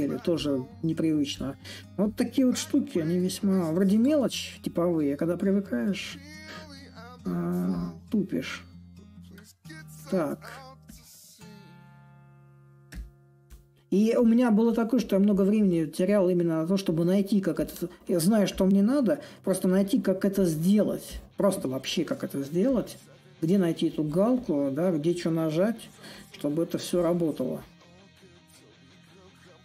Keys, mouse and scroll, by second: 6.7-9.5 drag, 10.6-15.6 drag, 15.9-20.9 drag, 22.4-25.5 drag, 25.5 s, 26.7-29.6 drag.